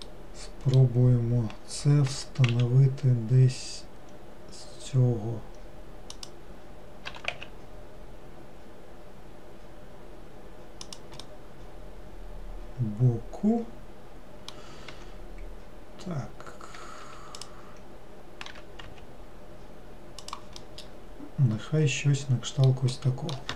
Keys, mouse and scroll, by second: 0.1-2.2 middle drag, 2.2 g, 11.3-14.5 middle drag, 17.5 click, 20.7-23.5 middle drag.